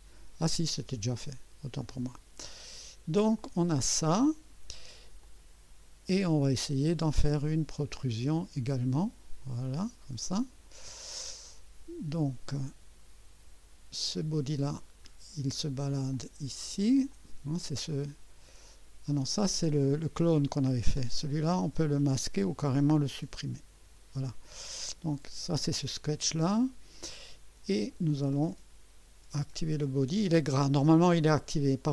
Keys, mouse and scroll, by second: 1.4-1.8 scroll down 1, 3.4 click, 4.6 scroll down 1, 5.2-6.3 drag, 7.1 right click, 8.0-11.2 drag, 13.7 scroll down 1, 14.9 scroll down 2, 16.1 click, 17.1-17.6 drag, 19.4 click, 23.7 Delete, 25.1 click.